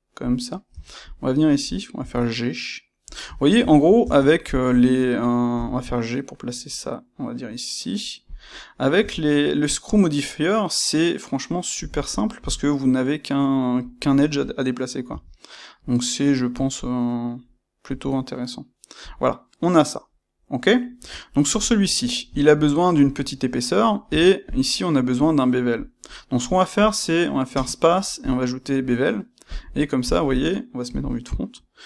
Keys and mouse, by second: 0.2 click, 0.6 Tab, 1.0 click, 1.9 g, 3.1 click, 3.3-4.4 ctrl+shift+middle drag, 4.0 Tab, 4.4 click, 5.6 g, 8.3 click, 8.9 e, 11.9 click, 12.3 g, 13.8 click, 15.0 e, 19.1 click, 19.9-22.5 middle drag, 20.9 Tab, 24.1 Tab, 24.4 click, 24.6 middle click, 27.5 space, 28.3 space.